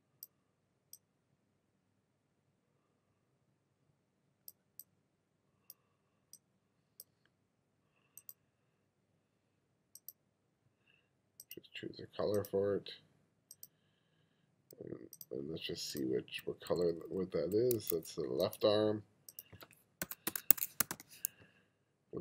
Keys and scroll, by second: 16.5 2, 17.8 1, 19.8-21.4 typing.